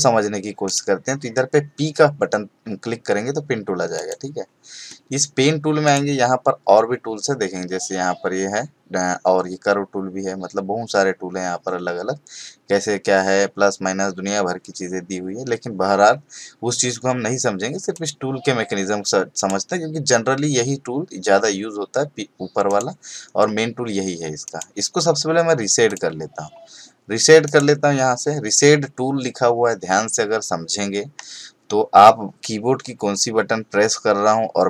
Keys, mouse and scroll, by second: 0.7 right click, 3.9 click, 5.8 right click, 17.9 click, 19.3 right click, 22.7 click, 24.4 right click, 25.9 click, 27.4 right click.